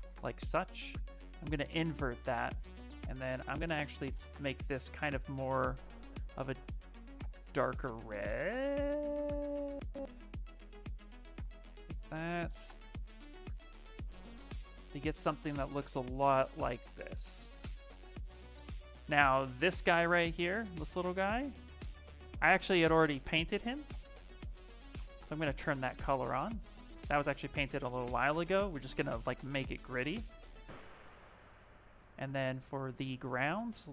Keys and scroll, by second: 32.9 shift+f, 33.3 shift+f.